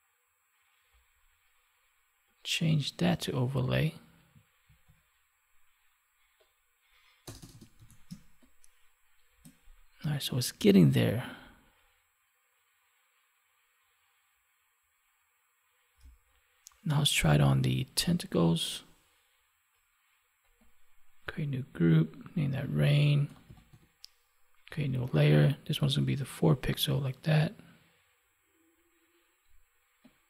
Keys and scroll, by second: 4.5 ctrl+s, 7.7 ctrl+s, 8.0 space, 15.9 space.